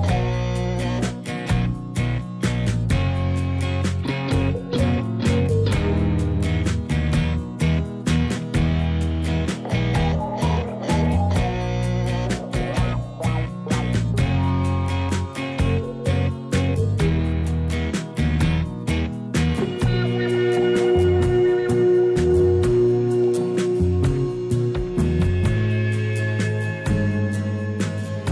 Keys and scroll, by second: 20.2 ctrl+z.